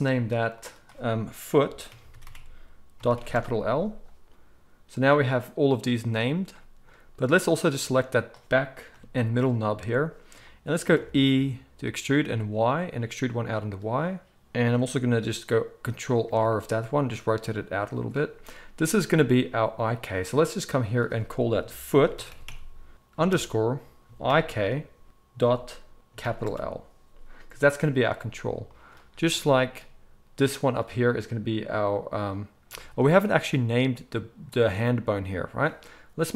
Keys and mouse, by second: 0.5-5.0 drag, 2.2 o, 5.0-7.3 middle drag, 7.3 click, 7.4-20.8 middle drag, 8.9 KP_3, 10.9 e, 16.2 ctrl+r, 20.8-30.7 drag, 30.7-36.3 middle drag.